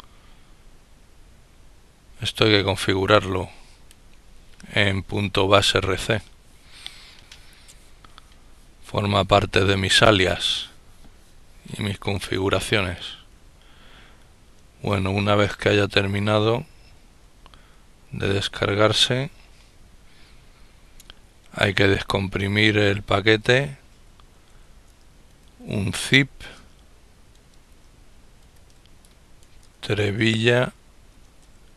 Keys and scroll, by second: 16.6 ctrl+-, 17.4 ctrl+-, 24.1-24.8 typing, 31.3-31.7 typing.